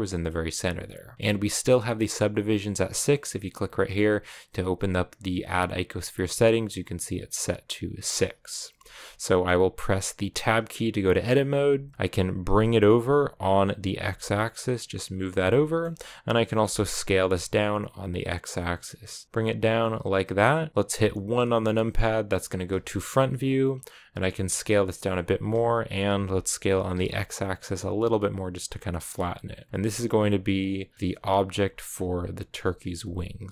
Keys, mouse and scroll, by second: 10.2 Tab, 12.3 g, 15.4 shift+middle click, 16.1-16.5 scroll up 1, 16.5 s, 22.2 KP_1, 24.1 s, 25.3 s, 29.6 s, 29.8 g, 30.9 s, 31.3 g, 32.4 s, 32.8 g.